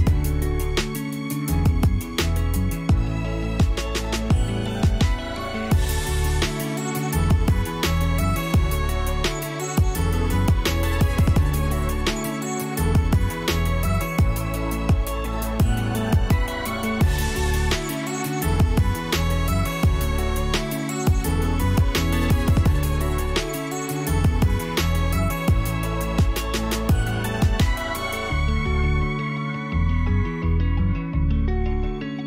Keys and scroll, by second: 1.7-2.7 typing, 3.4 Return, 11.9-13.4 typing, 13.7 Return.